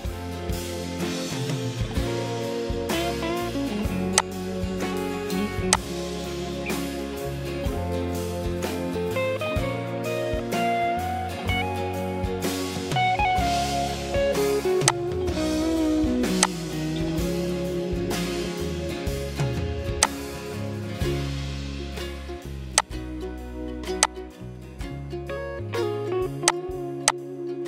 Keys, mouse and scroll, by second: 7.7 Right, 9.7 BackSpace, 11.6 m.